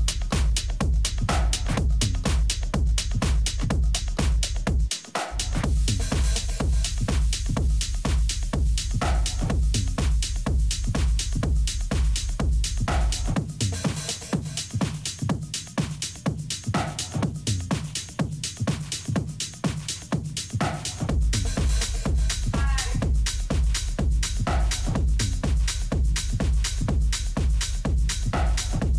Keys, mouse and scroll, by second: 3.6 middle click, 4.9 Tab, 6.0 Tab, 6.5 a, 7.0 a, 7.3 a, 7.8-9.7 right drag, 9.2 ctrl+a, 11.7 Tab, 12.3 a, 13.4 Tab, 14.0-15.7 middle drag, 16.3-18.1 drag, 20.4-22.3 drag, 27.0-28.7 drag.